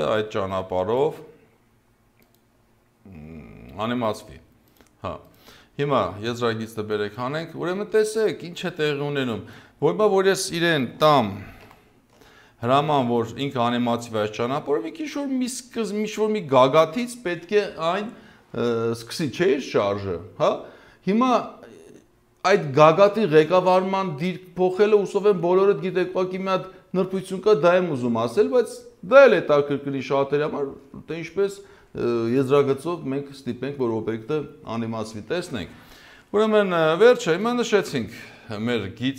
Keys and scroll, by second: 11.7 ctrl+alt+Home.